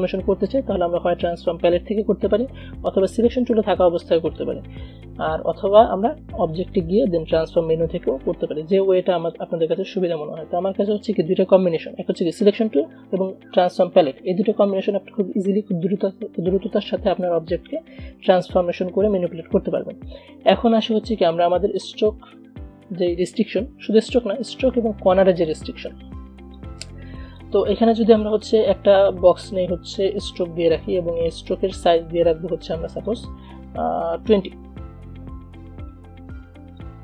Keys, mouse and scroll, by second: 21.0-22.9 drag, 22.9 Delete, 25.6 click, 26.6-29.9 shift+drag, 30.5 shift+click, 33.2 shift+click, 35.5 shift+v, 36.9-37.0 shift+drag.